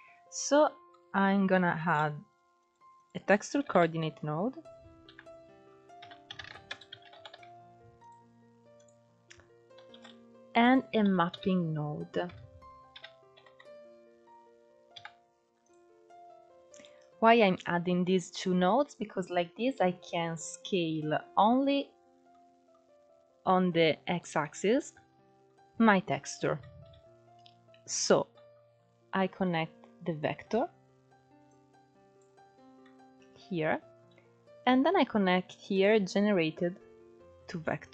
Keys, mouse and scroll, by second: 7.8 o, 15.4 p, 29.9-32.1 drag, 32.1-32.8 scroll down 3, 37.3-37.9 drag.